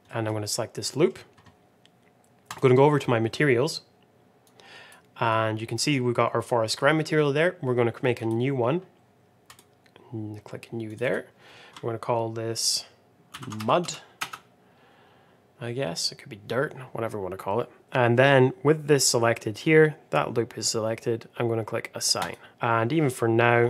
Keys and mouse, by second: 0.0 middle click, 0.8 middle click, 5.3 click, 8.1 click, 9.5 click, 10.8 click, 10.9-15.2 drag, 19.2 middle click, 22.1 click.